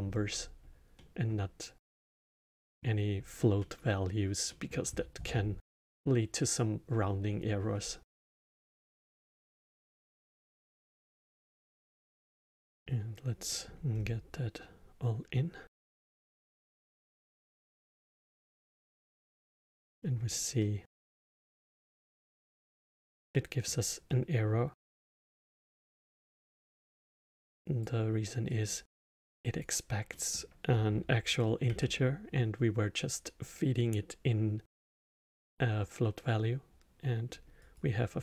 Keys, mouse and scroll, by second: 0.9-7.6 middle drag, 9.2 drag, 10.9 click, 12.4-13.9 middle drag, 13.9 scroll down 2, 16.0 click, 18.2-19.4 middle drag, 19.4 scroll up 2, 19.9-27.5 middle drag, 27.5 click, 28.5 drag, 29.6 click, 30.1-31.6 middle drag, 31.6 shift+a.